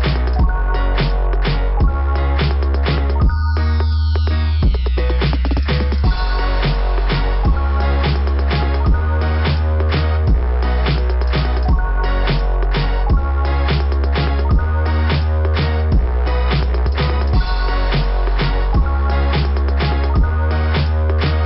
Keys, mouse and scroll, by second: 0.3 click, 12.8 click, 14.7 click, 15.0 click, 15.3 click, 15.7 click, 16.1 click, 16.1 click, 18.3 click, 18.5 click.